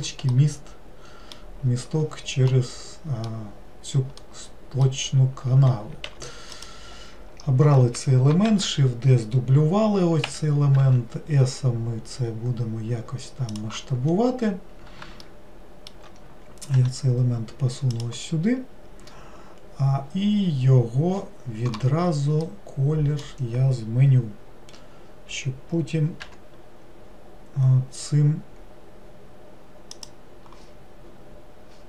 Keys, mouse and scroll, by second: 0.4-6.1 middle drag, 6.1 3, 6.6 click, 14.1-14.7 scroll up 2, 15.2-16.8 shift+middle drag, 16.8 g, 22.5-25.5 middle drag.